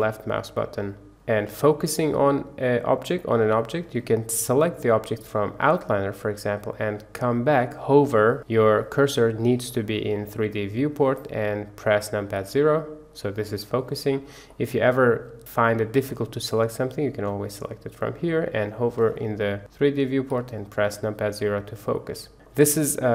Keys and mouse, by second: 1.6-2.8 middle drag, 5.6 middle click, 12.3 KP_Decimal, 13.4-13.7 middle drag, 14.5-16.0 middle drag, 17.4 click, 20.3 KP_Decimal, 21.9-22.3 middle drag, 22.3 click.